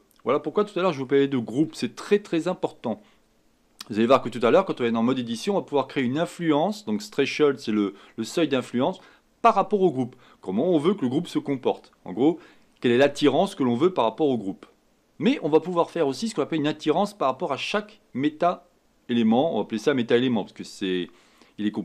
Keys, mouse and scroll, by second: 1.0-21.8 shift+middle drag.